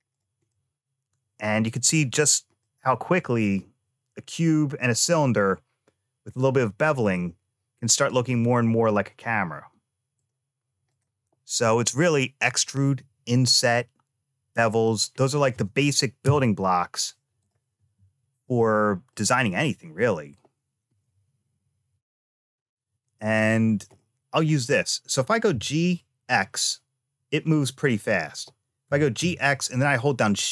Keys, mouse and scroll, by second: 0.0 click, 0.3-1.7 middle drag, 2.4 scroll up 1, 2.4 middle click, 6.9-10.0 middle drag, 10.7 click, 14.9 scroll down 1, 16.1 Tab, 17.2 click, 18.4 middle click, 23.2 click, 23.8 middle click, 25.3 g, 28.7 g.